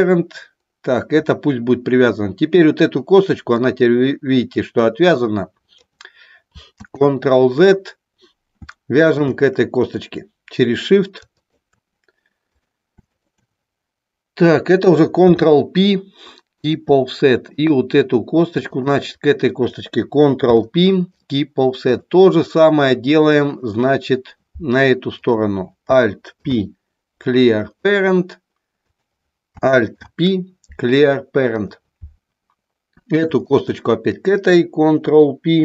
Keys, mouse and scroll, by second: 3.6-5.8 drag, 6.8 ctrl+z, 8.9-10.8 alt+drag, 11.3-12.4 shift+drag, 13.2 shift+click, 15.2 ctrl+p, 17.4 click, 20.4 ctrl+p, 22.6-23.7 middle drag, 25.2 click, 26.3 alt+p, 28.8 click, 29.8 alt+p, 33.5 shift+click.